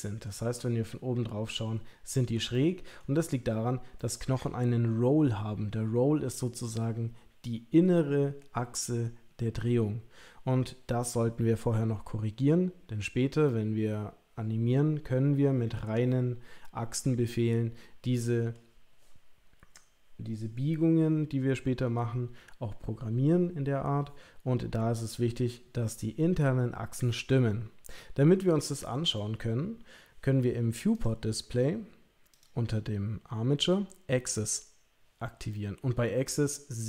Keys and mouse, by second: 0.4 KP_7, 2.5-3.0 middle drag, 3.9-4.4 middle drag, 13.5-18.5 middle drag, 30.9 click, 32.3 click, 34.3 click, 35.6-36.8 middle drag.